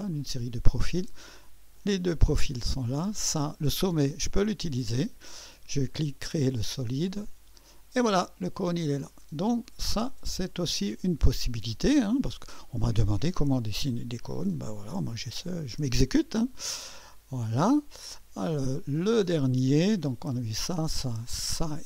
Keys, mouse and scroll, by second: 0.0 click, 1.7 click, 2.8 click, 3.4-4.4 drag, 4.5 click, 6.0 click, 7.1 click, 8.3-10.0 drag, 11.2 click, 17.0 click, 18.8 click.